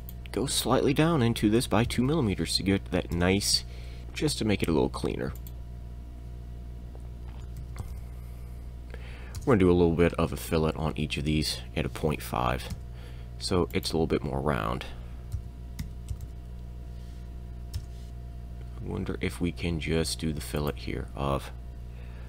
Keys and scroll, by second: 1.6 2, 1.9 m, 3.2 Return, 4.0 f, 4.0 e, 5.4 e, 7.6 5, 7.8 m, 7.9 e, 7.9 m, 9.4 Return, 12.7 f, 13.7 e, 15.4-16.3 typing, 17.8 Return, 18.1 f, 20.6 e.